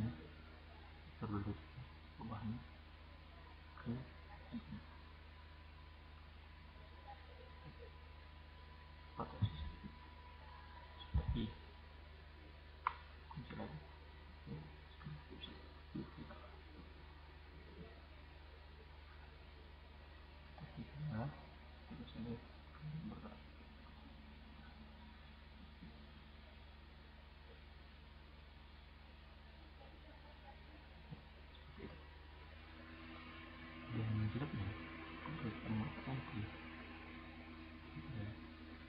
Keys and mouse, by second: 0.0-1.2 drag, 16.0 click, 20.7 drag, 21.5-21.9 drag, 26.9 click, 31.9 click, 33.1 click, 37.2-37.9 drag.